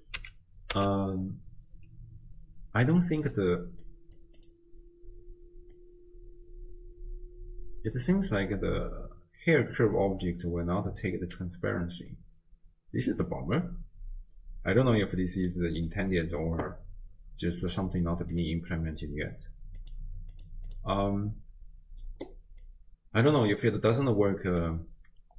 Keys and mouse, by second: 0.2 n, 0.7 n, 3.2 click, 3.9 click, 5.7-11.4 drag, 12.3-15.5 middle drag, 18.4 click, 19.8 click, 20.4 click, 22.6-24.6 drag.